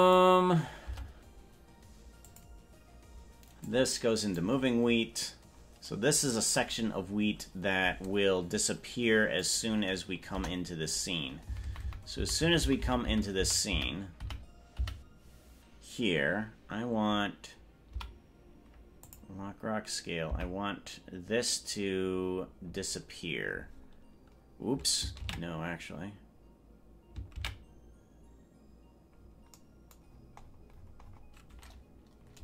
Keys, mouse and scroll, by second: 0.0 click, 1.1 Tab, 2.2 click, 3.6-4.9 drag, 9.5 click, 10.5 KP_0, 11.7 Right, 11.9 Right, 12.1 Right, 12.5 Right, 12.7 Right, 12.9 Right, 13.1 Right, 13.3 Right, 13.7 Right, 13.9 Right, 14.5 Right, 15.1 Right, 17.9 i, 20.5 Right, 26.3 ctrl+z, 28.5 ctrl+z, 30.1-30.7 scroll down 7, 30.5 scroll up 1, 30.7-31.3 scroll down 8.